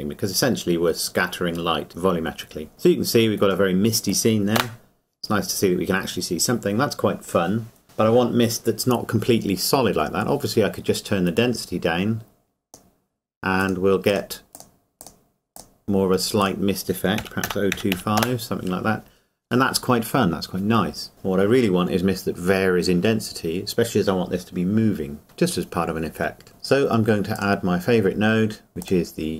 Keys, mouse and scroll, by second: 3.7 middle click, 4.6 KP_0, 5.9-7.8 scroll up 1, 11.3 click, 17.2 KP_Decimal, 27.3 click.